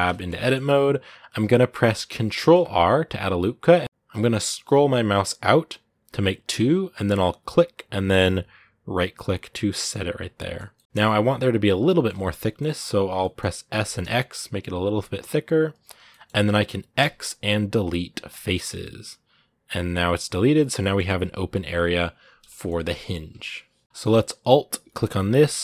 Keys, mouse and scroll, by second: 2.2 ctrl+r, 10.1-13.5 middle drag, 13.5 s, 15.8 scroll down 2, 15.9-18.2 middle drag, 18.2 x, 18.6-20.1 middle drag, 20.1-20.6 scroll up 1, 20.6-25.1 middle drag, 25.1 alt+right click, 25.5-25.6 middle drag.